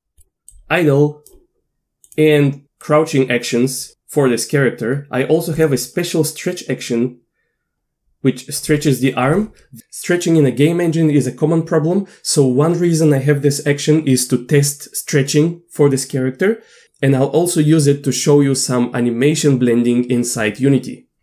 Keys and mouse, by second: 0.2 click, 0.6-1.3 drag, 2.1 click, 2.8-3.8 drag, 5.6 click, 6.6-8.6 drag, 8.8 middle drag.